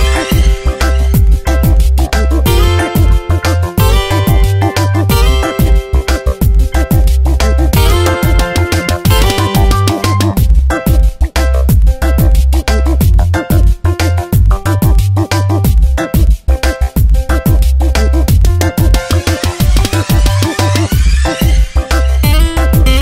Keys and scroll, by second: 1.1 ctrl+Return, 1.5 Tab, 2.1 v, 3.0 ctrl+z, 3.8 Delete, 5.7 ctrl+z, 6.8 ctrl+z, 9.1 ctrl+z, 11.6 ctrl+z, 12.6 ctrl+shift+i, 13.8 Tab, 15.4 space, 16.0 Tab, 18.5 ctrl+t, 21.8 Return, 22.1 Tab.